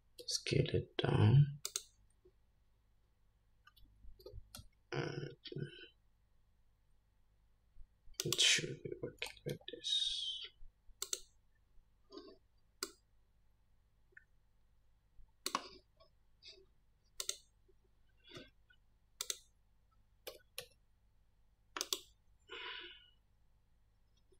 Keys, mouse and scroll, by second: 0.5 s, 4.5 r, 9.5 g, 13.1-17.6 drag, 19.5 click, 20.6 g.